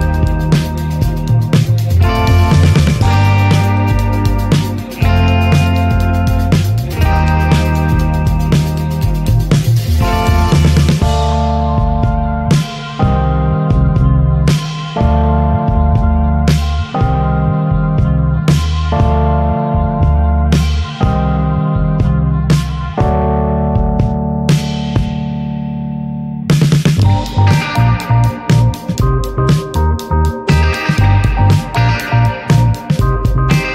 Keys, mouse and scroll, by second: 0.6-0.9 right drag, 0.9-1.5 shift+middle drag, 1.5 scroll down 4, 2.4 middle click, 2.4-3.0 scroll up 4, 2.7 shift+middle click, 4.1-6.3 drag, 6.3 ctrl+z, 6.9 scroll down 3, 7.3 middle click, 8.5-9.6 right drag, 9.6-11.5 drag, 11.5 Tab, 11.6 drag, 11.9 middle click, 12.2 click, 12.4 scroll down 4, 12.6-13.3 shift+middle drag, 13.3 ctrl+1, 13.6 ctrl+2, 13.8 drag, 14.1 alt+middle click, 14.4 alt+middle click, 14.7 ctrl+s, 14.9-16.4 shift+middle drag, 16.4 click, 17.0 ctrl+s, 19.5-22.1 drag, 24.0 click, 24.9 click, 25.6 click, 25.9-26.6 middle drag, 26.7 alt+middle click, 28.2-30.8 middle drag, 30.8 click, 31.1-32.3 shift+middle drag, 32.3 click, 33.1-33.7 middle drag.